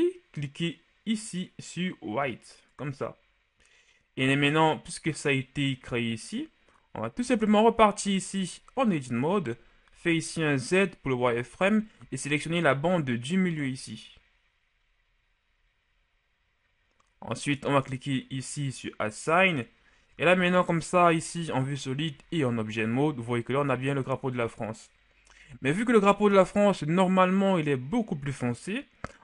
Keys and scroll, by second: 9.2 z, 20.1 Tab, 22.1 z.